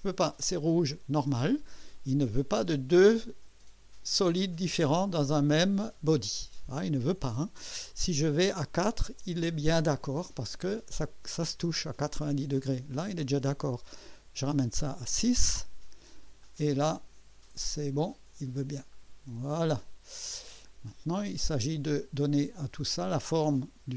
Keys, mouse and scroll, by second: 8.2 scroll up 2, 8.7 scroll up 2, 14.1 scroll up 2, 14.9 scroll up 2, 16.4 click, 18.9 click, 20.4 scroll down 2, 20.9-22.2 drag.